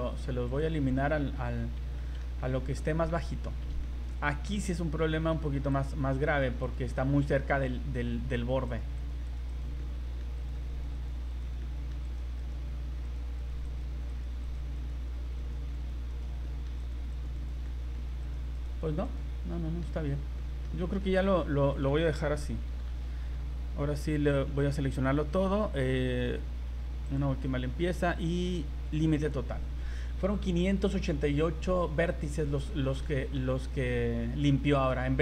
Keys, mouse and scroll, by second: 0.5 click, 1.5-2.0 scroll down 3, 2.0 shift+middle click, 2.4 middle click, 3.1 a, 3.8 shift+middle click, 4.2 scroll up 3, 4.4 z, 5.0 middle click, 5.3 z, 5.7 right click, 6.3 right click, 6.6 right click, 7.0 shift+middle click, 8.7 right click, 9.2 right click, 9.4 right click, 9.8 middle click, 10.4 right click, 10.9 right click, 11.0 right click, 11.3 right click, 11.6 middle click, 12.0 right click, 12.4 right click, 13.1 right click, 13.4 right click, 13.7 right click, 14.1 right click, 14.4 right click, 14.8 right click, 15.5 right click, 15.7 right click, 16.1 right click, 16.4 middle click, 16.8 right click, 17.3 right click, 17.6 middle click, 18.2 right click, 18.6 right click, 19.1 right click, 19.5 middle click, 19.8-20.3 scroll down 5, 20.4 middle click, 20.8 shift+middle click, 21.2 middle click, 21.7 middle click, 21.8 shift+middle click, 22.7 v, 22.9 v, 24.1 a, 24.5 a, 27.0 click, 29.2 click, 32.4 scroll up 2, 32.8 shift+middle click, 33.1 middle click, 33.5 scroll up 2, 34.6 shift+middle click.